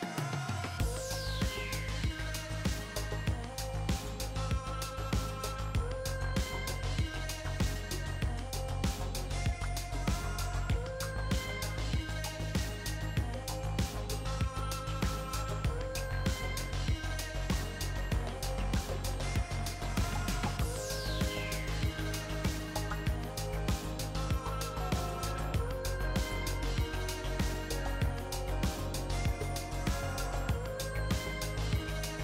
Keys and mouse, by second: 0.0-1.4 drag, 4.1-7.6 middle drag, 5.5 z, 10.8-14.1 drag, 14.3-15.5 drag, 16.2-18.7 drag, 19.9 click, 20.6 middle click, 21.2 KP_3, 21.5 KP_1, 24.5-26.8 middle drag, 26.8 click, 27.8-31.8 drag.